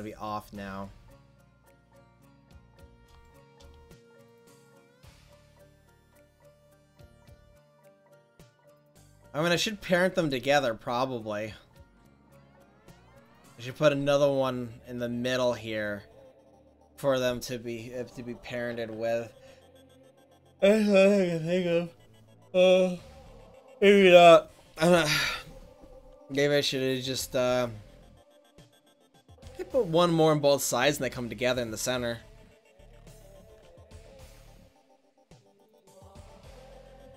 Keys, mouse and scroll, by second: 0.5 click, 0.6-1.3 right drag, 3.9-7.5 right drag, 7.5 middle click, 8.4 middle click, 8.6 middle click, 33.7 ctrl+z, 34.4 ctrl+z, 35.1 ctrl+z, 36.0 ctrl+z, 36.7 ctrl+z.